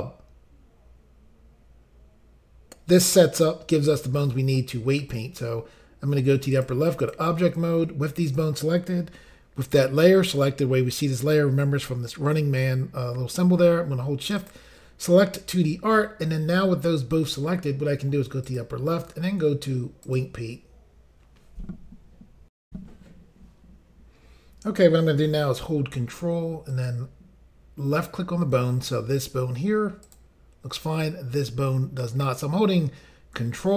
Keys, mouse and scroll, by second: 6.5 click, 7.0 click, 14.4 shift+click, 18.5 click, 20.1 click, 22.6 Insert, 22.6 Pause, 26.7 ctrl+click, 30.0 ctrl+click.